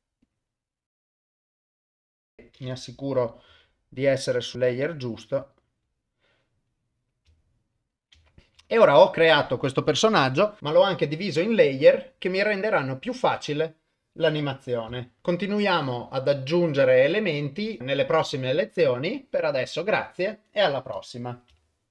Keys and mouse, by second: 0.2 click, 4.5-5.5 drag, 7.4 ctrl+middle click, 8.2 shift+middle click, 10.6 ctrl+s.